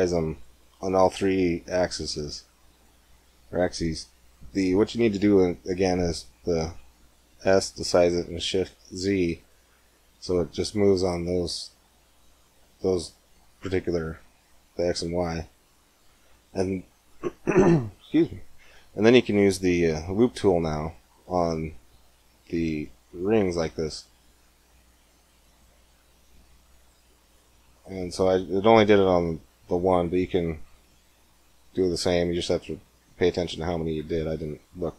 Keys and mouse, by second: 1.7-3.7 middle drag, 7.2 s, 21.0 ctrl+r, 27.5 middle click, 31.0-33.0 middle drag.